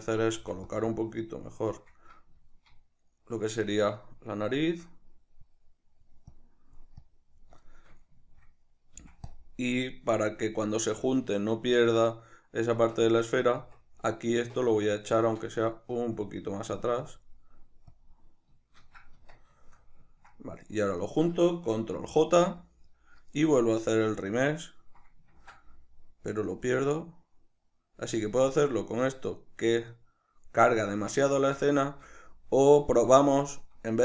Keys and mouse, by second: 0.0 ctrl+middle click, 0.3 f, 0.9-2.0 drag, 2.0-5.5 middle drag, 5.5-7.6 drag, 7.6-9.4 shift+middle drag, 9.0 f, 9.4 click, 9.6-13.2 middle drag, 12.8 Tab, 13.2 right click, 13.6 Tab, 14.8-16.2 middle drag, 16.2-17.5 drag, 17.5 middle click, 18.0 click, 18.9-20.0 middle drag, 19.2 Tab, 20.6 right click, 21.0 shift+right click, 22.2 ctrl+j, 22.8-24.3 shift+middle drag, 24.3-30.0 drag, 25.4 ctrl+z, 30.0-31.3 middle drag, 31.3 ctrl+z, 31.9 shift+middle click, 32.7 z, 33.5 shift+middle click.